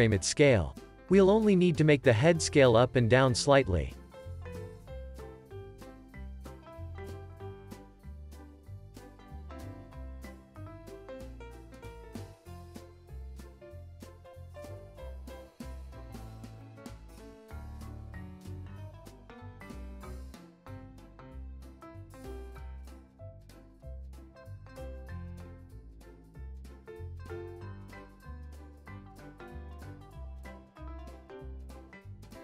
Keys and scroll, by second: 0.6 z, 1.8 z, 5.0 x, 6.6 z, 9.8 z, 10.4 super+s, 13.2 alt+shift+w, 15.6 x, 17.0 alt+shift+w, 17.6 z, 19.7 alt+shift+s, 20.4 z.